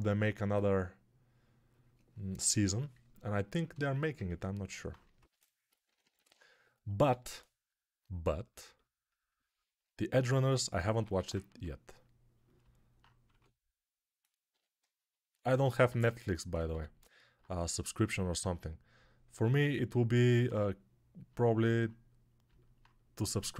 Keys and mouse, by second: 5.0-6.1 typing, 7.0 alt+q, 10.9 1, 13.1 2, 14.7 shift+3, 16.5 g.